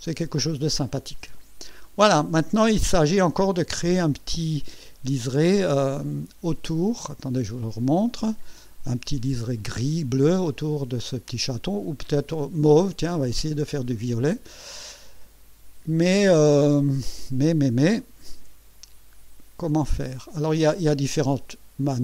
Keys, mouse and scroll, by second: 6.7 click, 8.2 click, 18.3 Escape, 19.6 click.